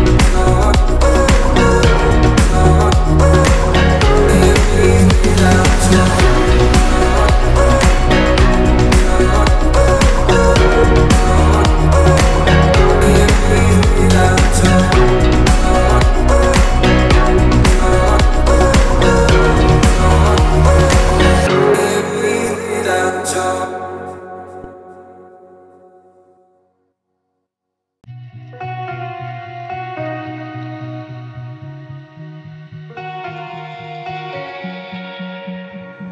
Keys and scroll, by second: 2.3 b, 10.9 space, 11.2 t, 19.4 space, 21.2 c, 28.2 space, 30.3 m, 33.4 space, 34.3 p.